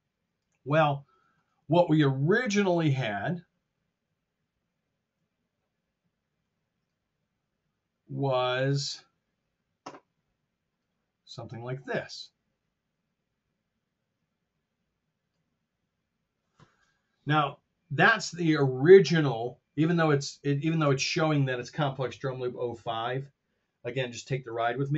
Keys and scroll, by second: 2.6 BackSpace, 4.6 F7.